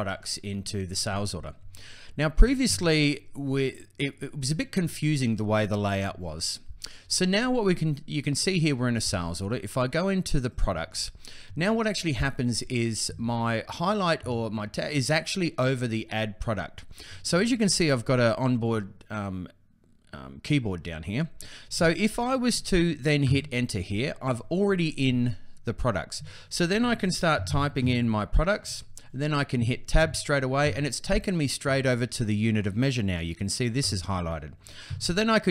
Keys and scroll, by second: 23.0 Return, 26.8-28.0 typing, 29.3 Tab.